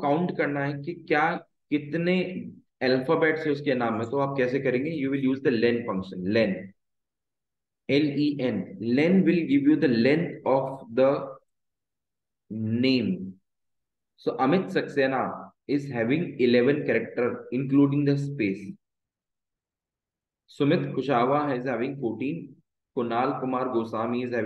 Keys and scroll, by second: 1.1 Down, 4.1 Right, 6.6 shift+9, 7.1 Left, 8.1 shift+0, 8.6 Return, 9.6 shift+Down, 12.1 ctrl+d, 17.6 Left, 19.6 Escape, 20.1 Down.